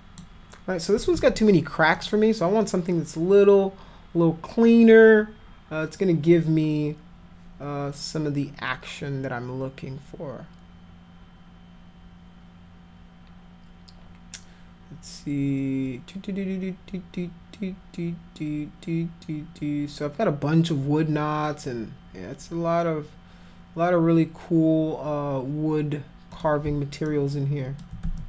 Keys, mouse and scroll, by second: 1.2 ctrl+z, 2.0 click, 26.3 click, 27.1 alt+click, 28.1 ctrl+z.